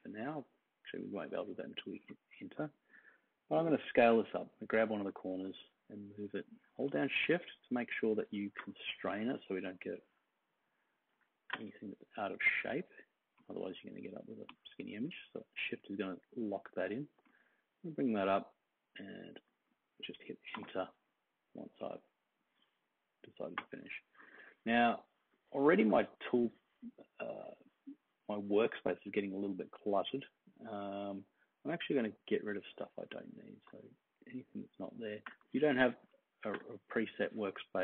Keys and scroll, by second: 20.5 Return.